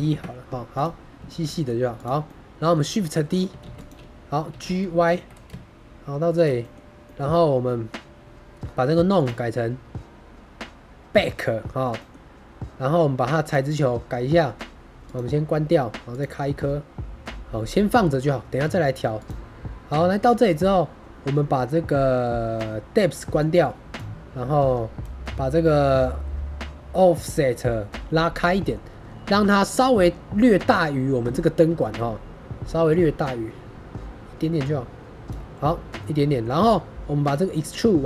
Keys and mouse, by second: 0.6 click, 1.2 shift+middle drag, 1.4 middle click, 1.9 click, 2.2-2.7 middle drag, 3.6 shift+d, 3.7 click, 4.4 g, 5.0 y, 6.2 shift+click, 6.5 click, 6.9 drag, 7.5 drag, 9.1-11.1 drag, 11.9 middle click, 13.3 click, 14.9 click, 16.1 click, 18.0 middle click, 19.1 click, 23.3 click, 28.4 middle drag, 31.7 shift+middle drag, 32.8-35.2 drag, 35.9-36.3 middle drag.